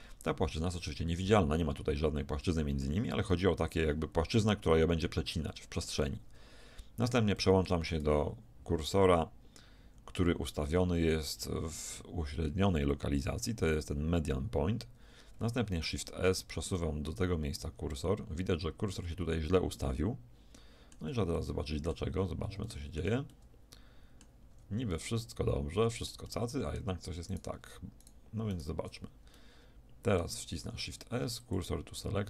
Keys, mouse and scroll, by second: 0.9 z, 2.9 z, 5.6-8.7 middle drag, 9.8 ctrl+., 15.9 shift+s, 17.9-19.9 middle drag, 21.4 middle click, 22.1 z, 24.5 a, 27.3 middle click, 28.1 click, 29.3-31.2 middle drag, 30.7 shift+s.